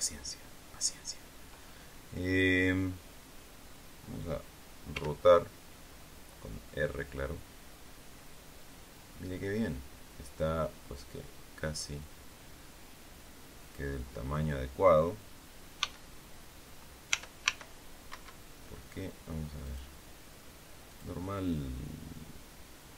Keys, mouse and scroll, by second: 4.8 r, 13.5 click, 15.7 s, 17.0 y, 19.6 click, 20.8 click.